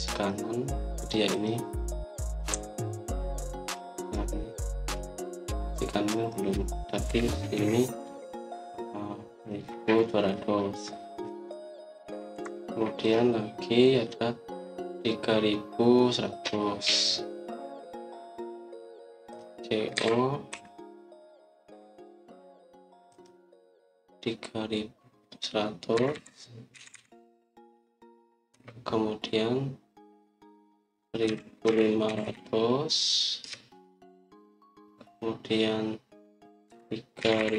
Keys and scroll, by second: 3.4 Escape, 7.7-8.9 typing, 12.4 Escape, 13.2 Escape, 20.8-21.4 typing, 26.6-27.6 typing, 29.4 Return, 31.9-33.0 typing, 34.3 Return, 37.3-37.5 typing.